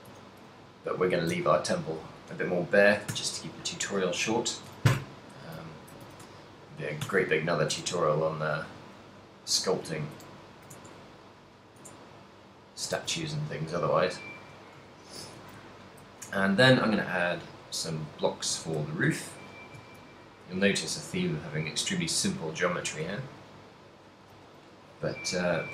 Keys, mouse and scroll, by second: 0.3 a, 1.7 ctrl+middle click, 3.3 a, 4.8-8.9 typing, 5.7 ctrl+middle click, 6.4 shift+middle click, 10.4 shift+s, 11.6 right click, 11.8 Tab, 12.4 right click, 13.1 shift+s, 15.0 shift+middle click, 15.4 a, 15.8 shift+middle click, 16.3 shift+a, 18.6 s, 19.5 click, 19.8 g, 20.5 right click, 21.4 s, 22.8 click, 22.9 s, 24.3 click, 24.5 r.